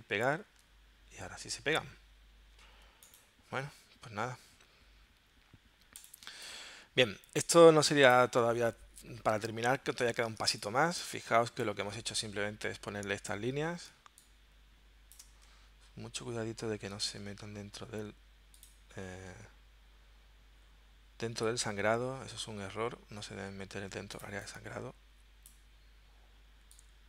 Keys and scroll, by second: 0.0 super+v, 6.3 space, 10.5 space, 13.9 space.